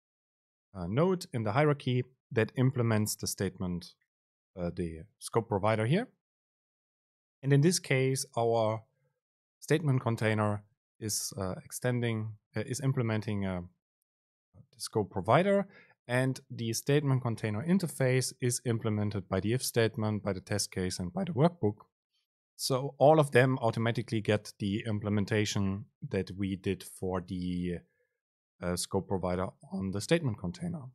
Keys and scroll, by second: 17.7 ctrl+h.